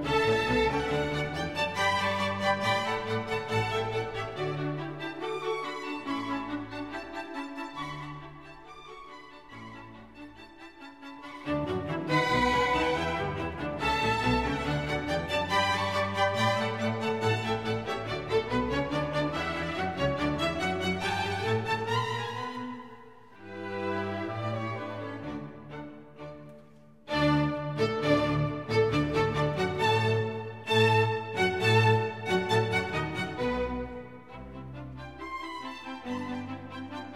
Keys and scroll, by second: 5.4 super+o, 10.7 super+o, 11.2 super+o, 11.7 super+o, 25.9 super+o.